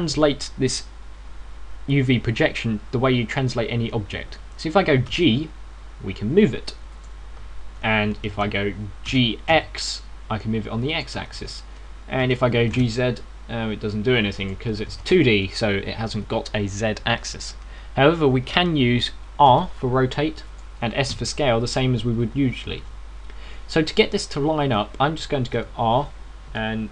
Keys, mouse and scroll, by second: 5.9 g, 9.1 ctrl+z, 9.1 click, 10.0 g, 12.2 ctrl+z, 12.2 click, 13.1 g, 15.4 click, 15.8 ctrl+z, 20.4 r, 22.0 s, 23.5 ctrl+z, 23.5 click, 24.1 ctrl+z, 26.5 r.